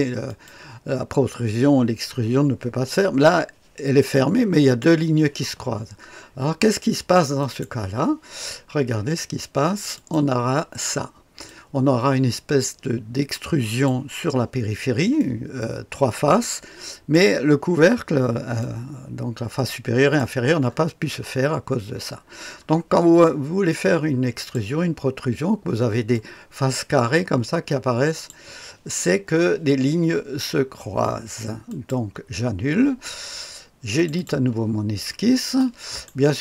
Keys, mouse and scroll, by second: 0.3 click, 2.5-3.4 scroll up 2, 7.4 click, 9.9 click, 10.9-11.5 scroll down 2, 11.5-13.9 drag, 15.2-17.2 drag, 18.6-20.2 drag, 20.7-22.2 scroll up 2, 22.2-23.2 scroll down 2, 23.2-24.5 drag, 26.1-28.3 drag, 31.7 click, 33.9 click, 34.2 click, 35.0-35.6 scroll up 2, 35.6 right click, 35.8 click.